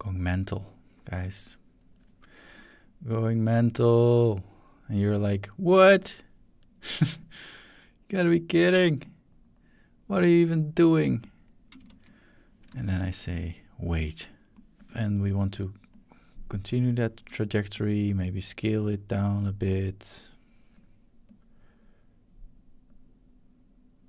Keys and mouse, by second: 2.5 click, 4.0-5.1 drag, 5.9 click, 7.2-8.5 drag, 9.0-10.3 drag, 11.2 click, 11.9 shift+z, 12.6 drag, 12.7 shift+z, 12.8 drag, 14.5-15.6 drag, 14.8 shift+middle click, 15.9 click, 17.7-18.5 drag, 18.8-20.5 drag, 21.3-24.0 drag.